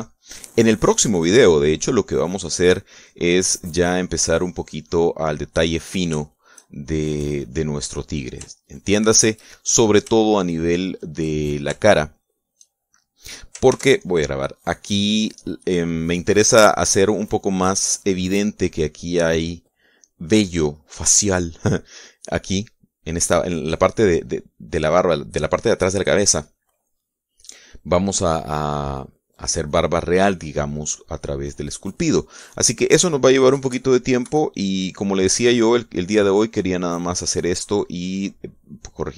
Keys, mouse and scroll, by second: 0.1 click, 0.6 middle click, 0.8-3.7 drag, 4.0 click, 4.8 click, 5.6-6.6 drag, 7.4 click, 7.4 shift+middle click, 7.6 shift+middle click, 8.2 shift+click, 8.8 click, 9.8 shift+middle click, 11.0 shift+middle click, 11.4 shift+click, 12.5 shift+click, 12.6 shift+click, 13.2 shift+click, 15.0 ctrl+s, 15.4 ctrl+click, 36.2-39.1 drag.